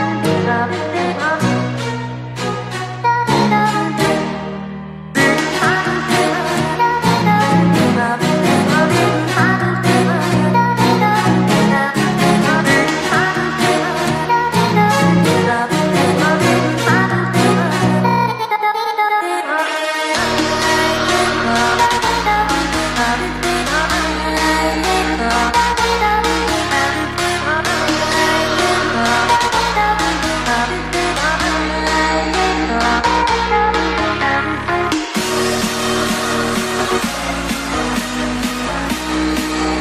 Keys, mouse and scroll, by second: 1.3 middle click, 1.6 KP_1, 2.0 KP_3, 2.7 r, 4.6 s, 6.1 g, 7.0 s, 8.2 KP_7, 8.8 r, 9.5 g, 10.8 r, 13.0 g, 14.0-16.3 typing, 17.6 g, 18.1 r, 23.9-34.0 drag, 36.9-39.8 drag.